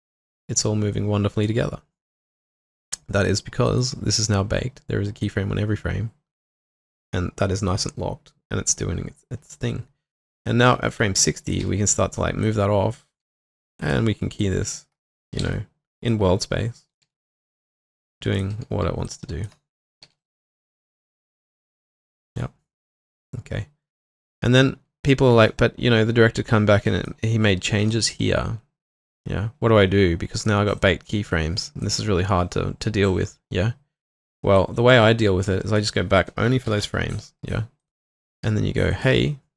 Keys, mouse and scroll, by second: 11.6 typing, 12.8 double click, 13.3 typing, 14.4 double click, 15.0-15.9 typing, 17.0 typing, 18.5 typing, 19.8-20.6 typing, 27.9 shift+click, 29.0 shift+click, 30.8 double click, 36.7 ctrl+alt+., 38.2 double click, 38.4 q.